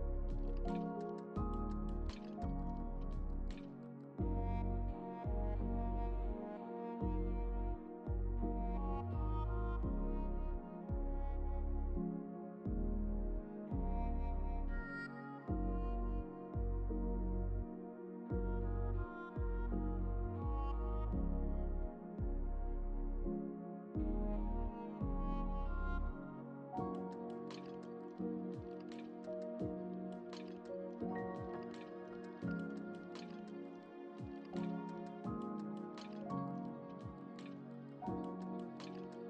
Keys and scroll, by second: 21.3 ctrl+t.